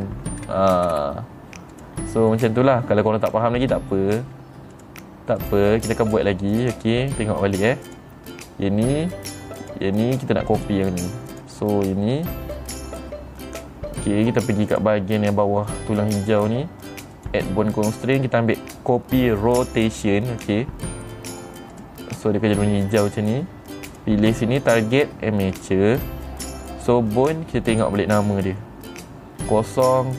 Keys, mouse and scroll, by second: 1.0 middle click, 1.0-1.4 scroll down 2, 1.4 middle click, 1.4 scroll up 4, 1.5 middle click, 2.3 click, 2.8-3.9 middle drag, 4.4 middle click, 5.3 click, 5.9 click, 6.6 click, 7.1 click, 8.4 click, 10.1 click, 11.0 click, 11.8 click, 15.2 click, 17.7 click, 22.3 click, 24.4 click, 26.1 click, 28.2 click.